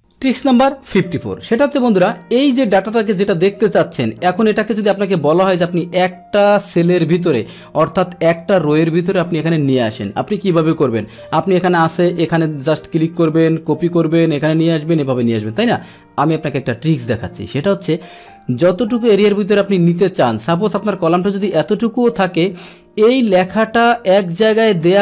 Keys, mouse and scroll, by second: 0.1 click, 2.4-4.3 drag, 5.2-7.3 drag, 8.4-10.0 drag, 11.0 click, 11.1 click, 12.0 click, 12.3 click, 12.6 click, 13.7 ctrl+c, 14.3 click, 14.8 click, 18.2-19.6 drag, 19.8 click, 20.6 click, 23.0 click, 23.9-24.3 drag, 24.8-25.0 drag.